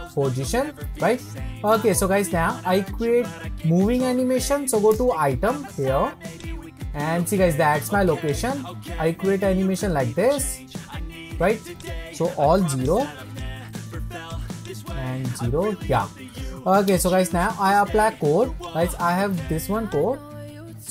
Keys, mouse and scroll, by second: 0.9-1.3 scroll up 1, 1.3-4.4 middle drag, 6.4 click, 8.2-14.4 drag, 14.6-16.9 drag.